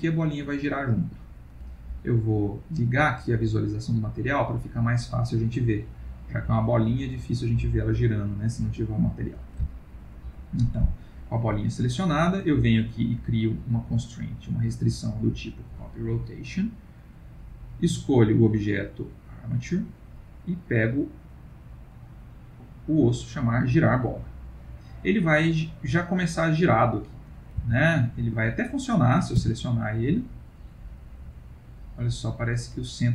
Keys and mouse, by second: 2.8 click, 5.0-5.6 middle click, 8.5 middle click, 10.8 click, 11.9 click, 17.1 click, 20.6 click, 24.5 middle click, 27.1 middle click, 27.1 click, 27.7 r, 28.8 click, 29.3 r.